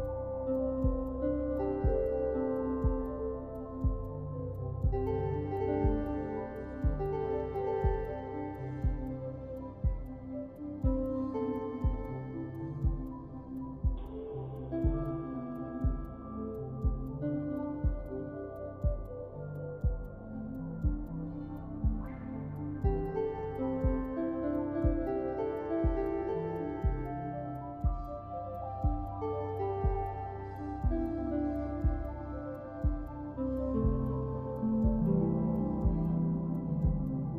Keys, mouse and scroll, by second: 0.1 click, 1.0 middle click, 1.3 click, 1.5 middle click, 2.0 scroll up 2, 2.1 middle click, 2.7 scroll down 3, 2.8 middle click, 3.0 scroll up 1, 3.2 middle click, 3.4 click, 3.5 middle click, 3.8 click, 4.0 f, 4.1 f, 4.1 middle click, 4.2 f, 4.2 f, 4.3 click, 4.5 middle click, 4.6 click, 4.9 middle click, 5.0 click, 5.1 middle click, 5.1 click, 5.3 middle click, 5.4 click, 5.5 middle click, 5.6 drag, 5.8 middle click, 5.9 click, 6.4 scroll down 2, 6.9 click, 7.3 shift+d, 7.7 x, 7.8 middle click, 7.9 click, 8.0 scroll down 3, 8.1 middle click, 8.4 middle click, 8.6 click, 9.1 middle click, 9.1-9.6 scroll down 4, 9.9 BackSpace, 10.4 scroll up 5, 10.4 middle click, 10.5 click, 10.7 o, 10.9 scroll up 5, 11.2 click, 11.6 scroll down 3, 12.2 click, 13.2 click, 14.4-14.8 scroll down 11, 14.9 middle click, 15.0-15.4 scroll up 15, 15.6 click, 16.4 middle click, 16.8 click, 17.0 scroll up 3, 17.3-18.1 drag, 18.1 middle click, 18.3 click, 18.5-18.8 scroll down 2, 18.5 middle click, 18.9 click, 19.2 ctrl+z, 19.4 click, 20.1 middle click, 20.2 click, 20.4 middle click, 20.5 click, 20.7 middle click, 20.9 click, 21.1 middle click, 21.3 f, 21.3 drag, 21.6 middle click, 21.7-23.2 drag, 23.2 scroll down 1, 23.4 middle click, 23.7-24.3 drag, 24.3 middle click, 24.9 click, 25.1 f, 25.2 f, 25.2-25.6 drag, 25.6 f, 25.7 click, 26.7 click, 27.0 scroll down 3, 27.1 middle click, 27.2 middle click, 27.2 click, 27.4 middle click, 27.9 click, 28.1 middle click, 28.1 scroll up 1, 28.2 click, 28.5 middle click, 28.7 click, 28.8 middle click, 29.0 click, 29.4 middle click, 29.7 middle click, 29.8 click, 30.6 middle click, 30.7 click, 31.3 f, 31.5 drag, 31.8 ctrl+z, 31.9 f, 32.0 click, 32.2 middle click, 32.4 click, 32.6 middle click, 32.7 click, 32.9 click, 33.1 middle click, 33.2 click, 33.3 middle click, 33.5 scroll down 2, 33.6 scroll up 4, 33.8 click, 34.0-34.5 scroll down 2, 34.2 click, 34.5 middle click, 34.8 click, 34.9 f, 35.1 middle click, 35.1 click, 35.6 middle click, 35.6 scroll down 1, 35.8 middle click, 35.9 click, 36.0 scroll up 2, 36.1 click, 36.2 middle click, 36.3 click, 36.6 scroll down 1, 36.7 middle click, 36.9 middle click, 37.1 click, 37.2 middle click.